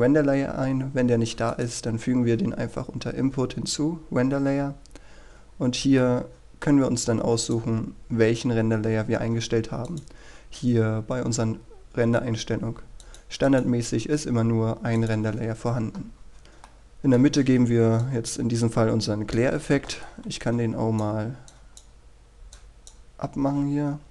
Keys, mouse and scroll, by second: 6.6 scroll up 1, 7.2 middle click, 8.0-8.5 scroll up 1, 8.5-15.6 drag, 16.8-17.3 scroll down 1, 17.8-18.9 middle drag, 19.2-24.1 drag.